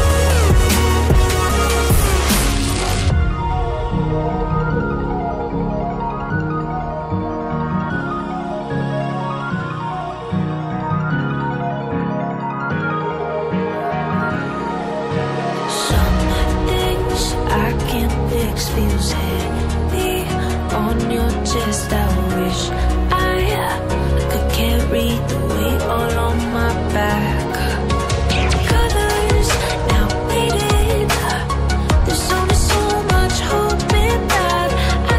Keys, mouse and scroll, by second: 0.0 scroll up 1, 0.4 click, 1.4 scroll down 1, 3.4 click, 4.6 click, 4.7 double click, 5.8 ctrl+c, 6.1 ctrl+v, 7.2 click, 7.8 Delete, 8.2 click, 13.1 click, 15.6 ctrl+z, 16.4 click, 17.7-19.2 scroll up 1, 19.2 click, 20.2-20.6 scroll down 1, 21.1-21.4 scroll down 1, 21.4-22.3 scroll up 1, 22.3 click, 29.4 double click, 29.6 scroll up 1, 30.1-30.5 scroll down 1, 31.5 click, 32.5-32.9 scroll down 1, 33.3 scroll down 1.